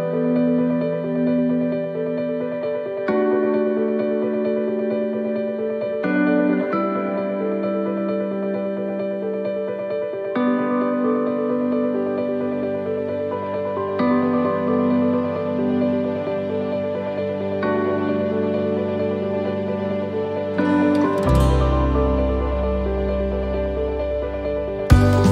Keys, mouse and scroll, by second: 1.5 shift+middle click, 6.3 click, 14.1-14.6 scroll up 4, 14.6 shift+middle click, 15.0 scroll up 1, 15.4 middle click, 16.9-17.4 scroll down 3, 17.2 middle click, 18.0 scroll down 1, 18.5 middle click, 19.1 scroll down 1, 19.7 shift+middle click, 20.4 a, 22.5 u.